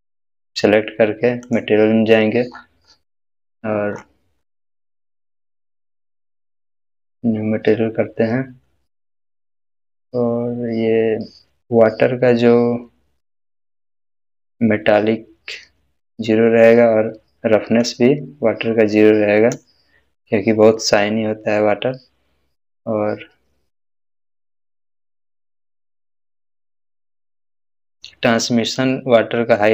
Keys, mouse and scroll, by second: 1.4 click, 1.4 click, 2.5-3.9 scroll up 1, 4.2-7.5 scroll up 1, 8.9 scroll up 1, 8.9-9.5 scroll down 1, 17.8-19.7 drag, 22.8-25.2 scroll down 1, 26.8 scroll down 1, 28.8-29.7 drag.